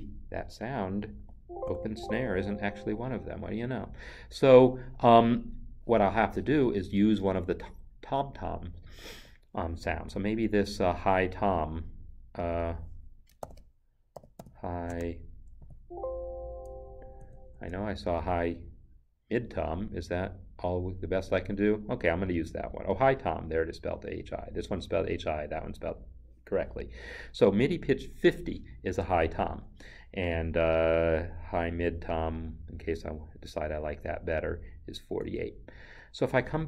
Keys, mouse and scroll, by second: 1.2 s, 1.6 n, 13.5 ctrl+f, 14.2 h, 14.4 i, 14.9 space, 15.6 t, 35.2 BackSpace, 35.3 alt+Tab.